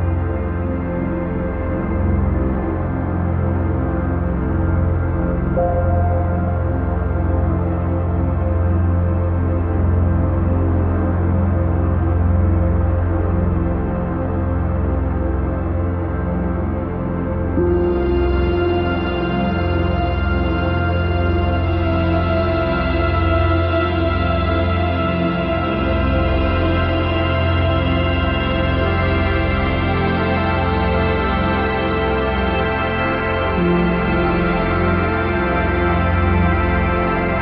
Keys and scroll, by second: 16.4 ctrl+0, 17.0 ctrl+-, 34.2 ctrl+z, 34.8 ctrl+=.